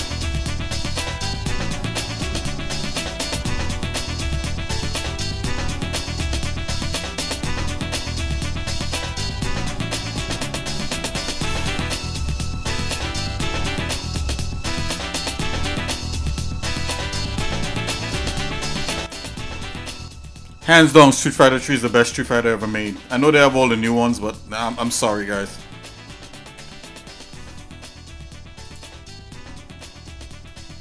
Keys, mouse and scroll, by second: 1.0 shift+middle click, 1.9 click, 2.4 shift+middle click, 4.0 ctrl+right click, 5.0 shift+middle click, 6.0 g, 7.5 shift+middle click, 8.9 click, 9.9 e, 12.0 click, 12.4 shift+middle click, 13.6 e, 15.3 shift+middle click, 22.0 middle click, 22.6 shift+middle click, 23.6 scroll up 2, 24.2 click, 24.7 scroll down 2, 25.2 shift+middle click, 26.5 e, 29.1 scroll up 1, 29.9 shift+middle click.